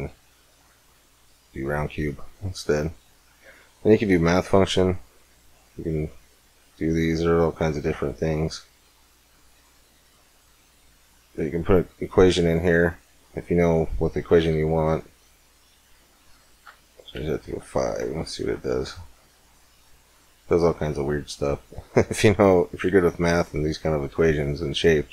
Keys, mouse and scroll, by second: 5.1-7.2 middle drag, 6.0-6.8 scroll up 2, 8.0-9.7 drag, 14.9-16.6 drag, 19.3-21.3 middle drag, 22.1-23.9 drag.